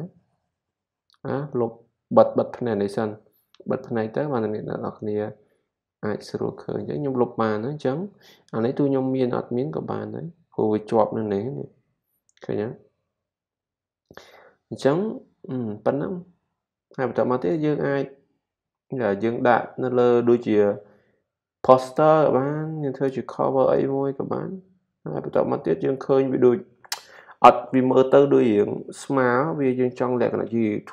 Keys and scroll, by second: 6.9 super+d, 13.6 super+d, 16.5 typing.